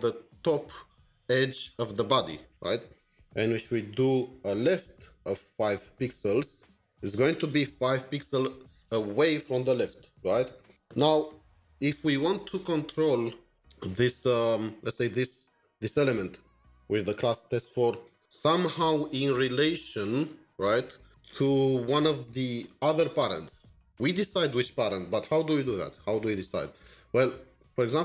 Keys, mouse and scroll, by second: 3.5 Up, 3.9 Tab, 5.2 Up, 5.7 Up, 6.0 Up, 6.3 Up, 6.7 Up.